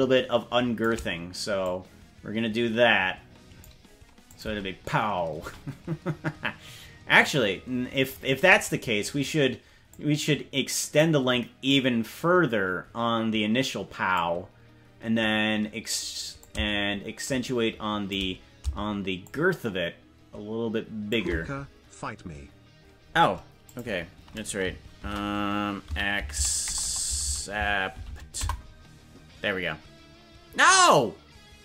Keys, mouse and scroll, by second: 1.6-3.6 drag, 4.2 click, 4.6 space, 5.4 space, 7.2 click, 9.8-11.0 drag, 11.6-14.1 drag, 16.4-18.1 drag, 19.2-21.1 shift+drag.